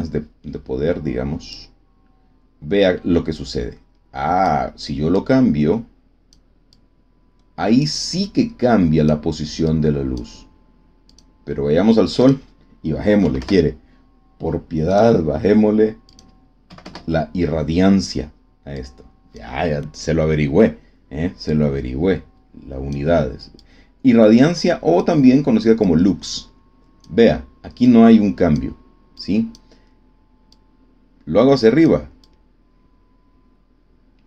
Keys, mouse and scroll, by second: 1.5-4.6 drag, 5.1-6.5 drag, 6.7-7.9 drag, 8.1 click, 9.6-10.3 drag, 11.0 click, 12.1 click, 13.1 5, 13.3 Return, 14.9 click, 16.0 click, 16.6 KP_1, 16.8 KP_Enter, 18.7 click, 21.4-23.1 drag, 23.5-25.1 drag, 25.7-27.1 drag, 27.8 click, 29.1 click, 30.5-32.0 drag, 32.1-34.2 drag.